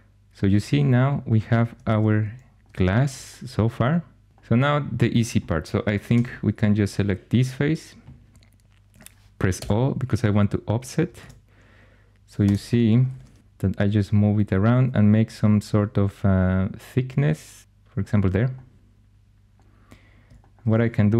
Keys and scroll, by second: 1.8 shift+super+e, 6.0 3, 9.4 o, 11.1 shift+super+e, 12.3 ⟲, 13.0 shift+super+e, 13.4 o.